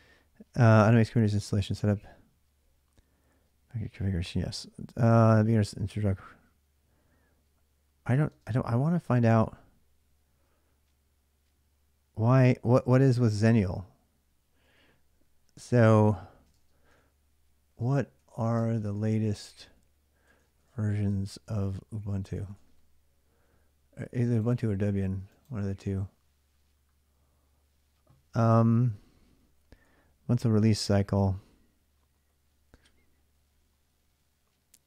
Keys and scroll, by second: 8.1 BackSpace, 14.4 typing, 16.2-22.8 typing, 29.4-32.5 typing, 34.7 space.